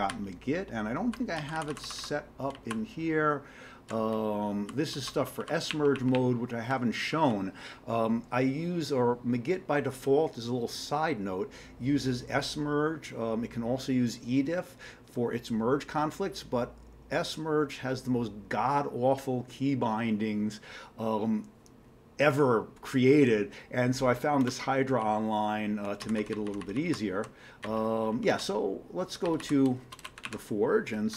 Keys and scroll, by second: 0.1 Down, 0.6 Down, 0.8 Down, 0.8-5.7 Down, 5.7 Up, 5.9 Up, 6.1-6.6 Up, 7.1 Down, 25.0-25.8 Down, 26.0 Down, 26.6 Down, 26.8 Down, 27.2 Page_Down, 28.4-29.1 Down, 29.3 Down, 29.4 Down, 29.7 Return, 29.9-31.1 typing.